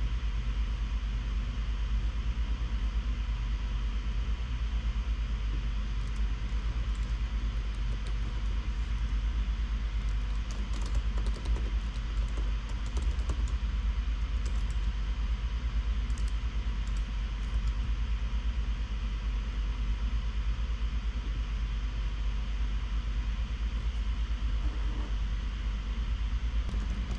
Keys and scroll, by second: 6.4 Return, 6.6-14.0 typing, 10.4 alt+BackSpace, 14.8 Tab, 14.9 Return, 16.4 Tab, 16.5 Return, 17.2 Tab, 17.9 ,, 21.6 typing, 26.8-27.1 typing.